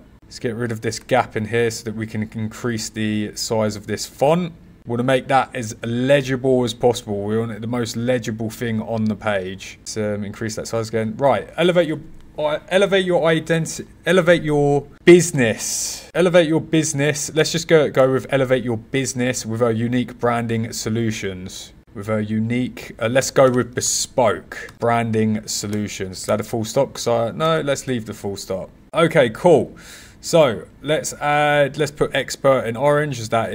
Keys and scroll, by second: 0.7 0, 0.9 Return, 4.7 Return, 15.0 b, 23.4 b.